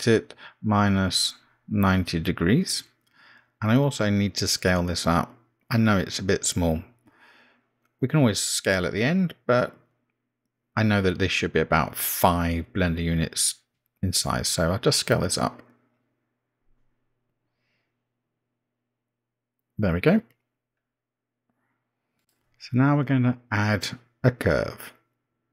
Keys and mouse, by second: 3.5 r, 12.2 n, 16.8 s.